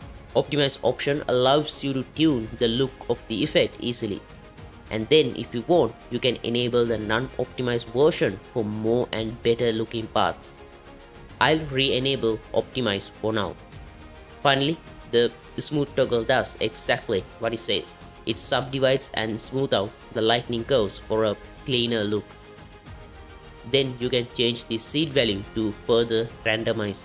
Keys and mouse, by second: 2.6 click, 5.5 click, 7.7 z, 11.4 click, 16.0 middle click, 24.9-27.0 drag.